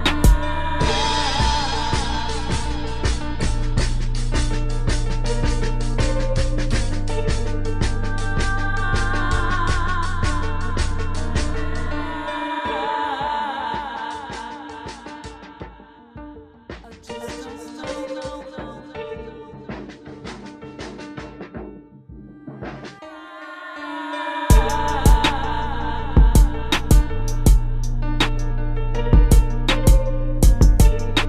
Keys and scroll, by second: 2.3 space, 10.8 space, 12.7 space, 19.7 space, 21.5 space, 22.4 space, 23.6 space, 24.3 space, 28.8 space.